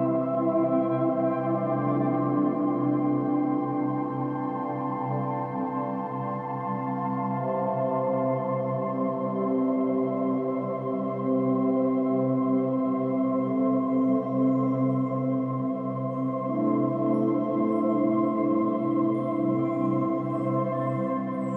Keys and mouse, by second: 1.9 click, 2.5-3.7 alt+drag, 3.8-4.2 ctrl+alt+drag, 4.6 ctrl+alt+drag, 5.3 ctrl+alt+drag, 5.9-6.5 ctrl+alt+drag, 6.8-7.2 ctrl+alt+drag, 7.3-8.5 alt+drag, 11.8 click, 14.0-14.9 drag, 15.0 click, 18.1-19.0 drag, 19.1-19.8 drag.